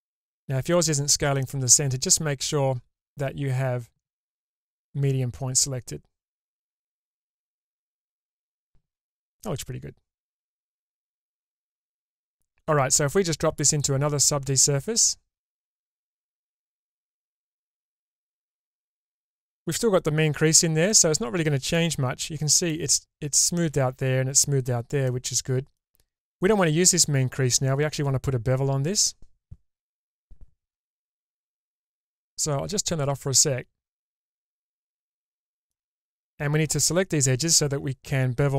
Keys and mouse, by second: 2.5-5.9 drag, 7.2-11.8 middle drag, 13.6-15.9 drag, 18.0 click, 20.9 middle click, 22.3 middle click, 25.1 middle click, 32.7 click, 33.4-35.7 middle drag, 36.7 middle click.